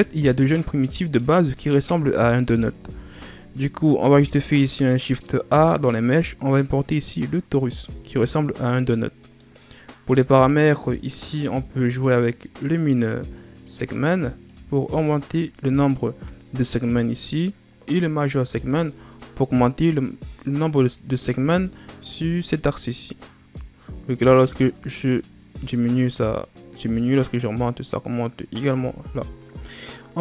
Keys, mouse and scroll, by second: 3.9 shift+a, 8.6-9.3 scroll down 2, 9.3-12.3 middle drag, 14.4-17.4 drag, 18.5-21.5 drag, 24.2-27.2 drag.